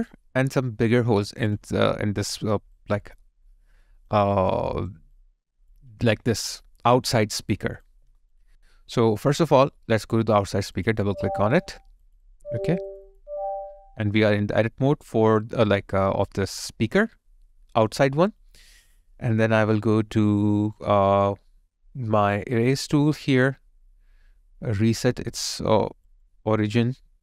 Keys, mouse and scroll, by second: 2.8 alt+click, 4.6 alt+right click, 5.2 alt+click, 9.0 alt+right click, 10.9 double click.